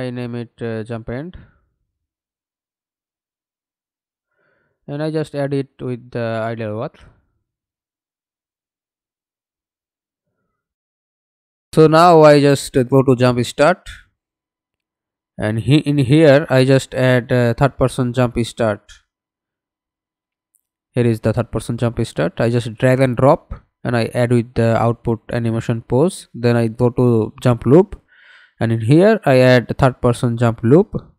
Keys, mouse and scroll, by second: 2.0-5.3 typing, 10.6 right click.